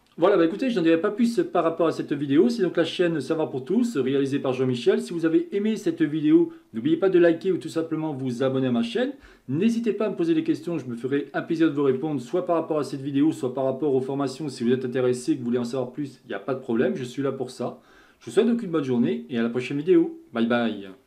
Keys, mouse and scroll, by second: 0.0-2.2 middle drag, 5.0-21.0 scroll.